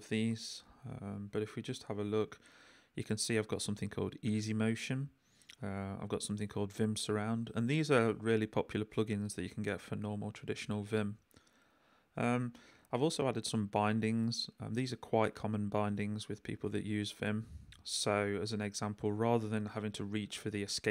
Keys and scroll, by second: 1.0 shift+v, 1.3 shift+j, 2.5 k, 5.6 j, 9.3 k, 10.2 j, 12.1 j, 13.6 k, 18.0 k, 18.9 j.